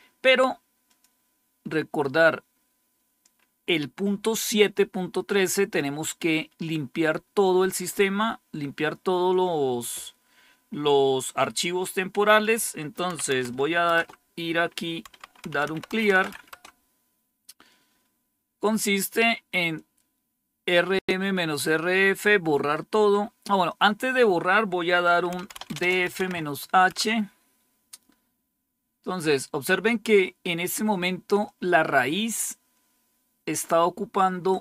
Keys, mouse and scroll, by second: 0.8 click, 3.3-7.6 scroll up 1, 12.2 click, 12.8 click, 13.1-13.5 typing, 13.9 Return, 15.0-17.0 typing, 19.6-21.4 drag, 22.4 right click, 23.6 click, 25.0-26.8 typing, 31.3-34.6 drag.